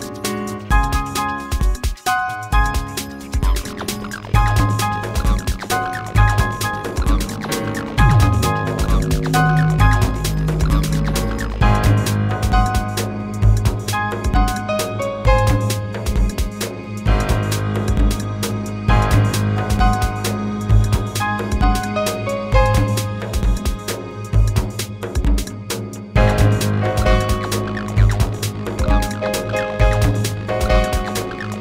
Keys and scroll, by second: 0.1 ctrl+z, 1.5 space, 11.3 space, 28.4 ctrl+z.